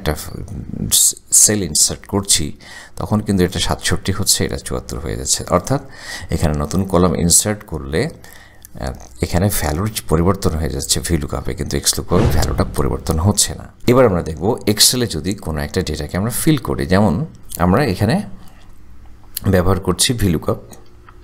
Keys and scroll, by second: 14.3 Delete, 18.2 =, 21.0-21.2 typing.